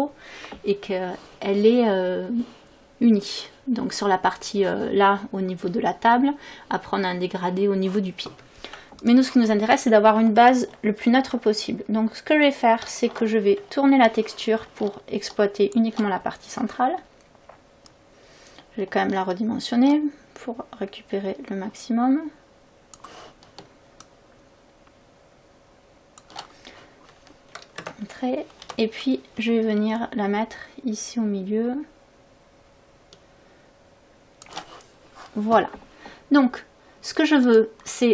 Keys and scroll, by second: 12.9 ctrl+t, 27.8 Return, 28.7 v.